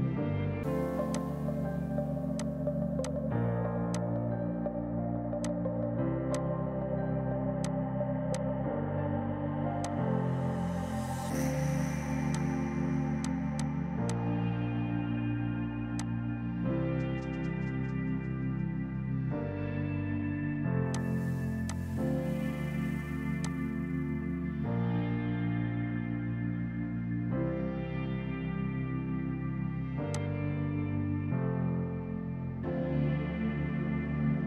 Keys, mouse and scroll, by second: 0.1 Delete, 1.2 click, 2.1 right click, 2.5 click, 4.6 ctrl+z, 5.0 typing, 5.5 click, 14.6 Down, 21.0 click, 30.2 click.